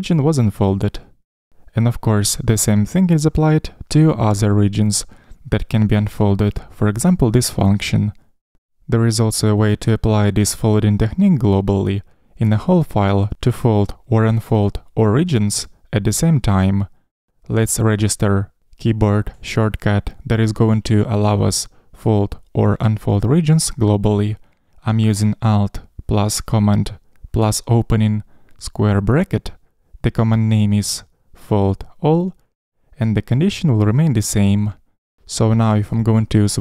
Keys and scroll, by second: 7.6 super+].